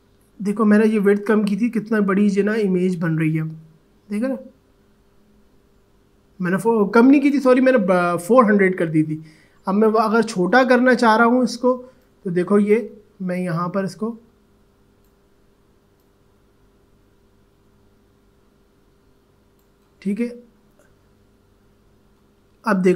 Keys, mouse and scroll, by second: 9.6 ctrl+z, 12.0-22.0 drag.